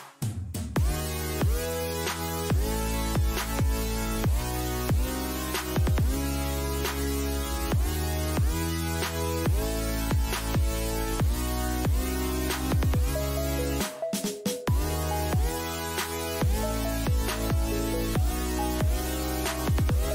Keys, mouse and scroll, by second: 3.4-5.4 middle drag, 12.9-15.5 middle drag, 16.8 middle click.